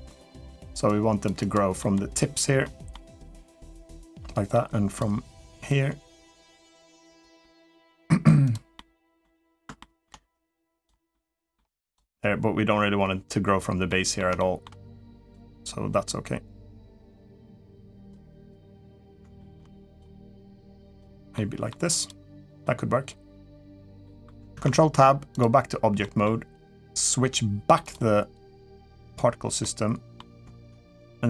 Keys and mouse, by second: 0.6 click, 1.6 middle click, 2.4 middle click, 3.4 click, 4.0 middle click, 5.5 click, 7.2 middle click, 8.2 click, 8.5 middle click, 9.6 shift+middle click, 10.1 click, 10.9 middle click, 11.7-13.7 drag, 13.7 middle click, 14.1 shift+middle click, 14.9 click, 17.7 click, 18.2 click, 19.2 shift+middle click, 19.7 click, 20.2 click, 21.1 middle click, 21.7 click, 22.2 middle click, 23.8 middle click, 24.3 ctrl+Tab, 25.8 middle click, 27.7 click, 28.8 click, 29.4-29.9 middle drag.